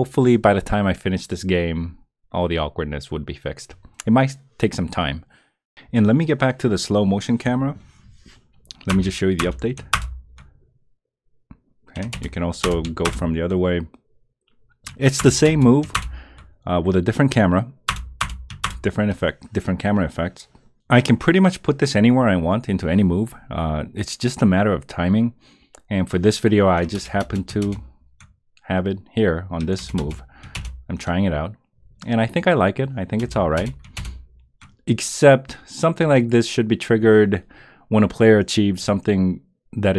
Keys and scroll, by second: 8.9 Return, 9.4 Return, 9.9 Return, 12.1 Return, 12.6 Return, 15.2 Return, 15.9 Return, 17.9 Return, 18.6 Return, 27.0 Return, 27.6 Return, 29.8 Return, 30.5 Return, 33.2 Return, 33.9 Return.